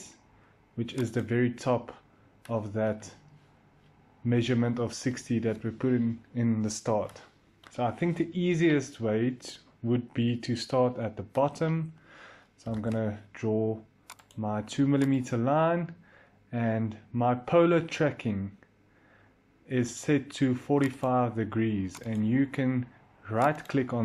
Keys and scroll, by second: 12.5 l, 14.4 i.